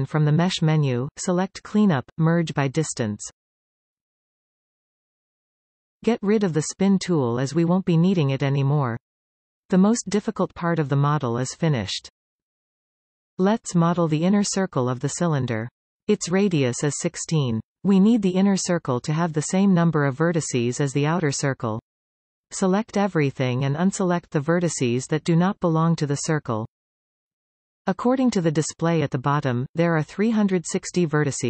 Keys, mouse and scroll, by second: 0.6 a, 2.4-5.5 drag, 9.7 click, 16.3 alt+a, 17.9 a, 19.8 b, 22.0 b.